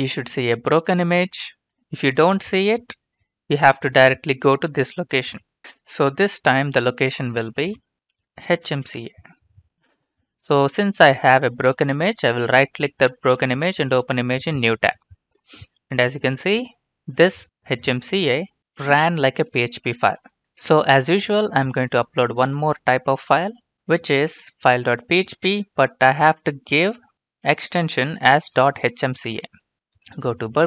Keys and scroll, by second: 7.4 ctrl+c, 7.9 Return, 7.9 ctrl+v, 8.2-10.2 typing, 9.5 Return, 29.7 ctrl+c.